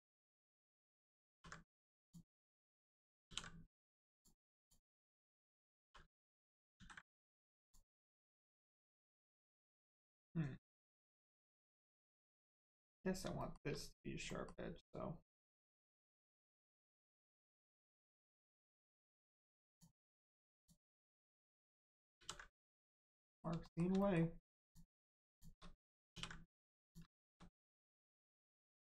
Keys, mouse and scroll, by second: 1.3 ctrl+e, 2.0 click, 3.3 ctrl+e, 4.1 click, 4.9 middle click, 5.8 shift+r, 6.2 middle click, 6.7 ctrl+z, 7.0 middle click, 7.1 middle click, 7.6 click, 8.0 middle click, 8.8 shift+scroll up 1, 8.9 shift+middle click, 12.5 middle click, 13.4 shift+middle click, 14.3 middle click, 14.3 middle click, 19.7 click, 20.5 shift+click, 21.2 middle click, 22.2 ctrl+e, 22.9 click, 23.2 middle click, 23.6 shift+middle click, 24.0 middle click, 24.6 click, 25.3 shift+click, 26.1 ctrl+e, 26.8 click, 27.2 shift+middle click, 27.5 scroll down 1, 27.8 middle click, 28.7-28.9 scroll down 1.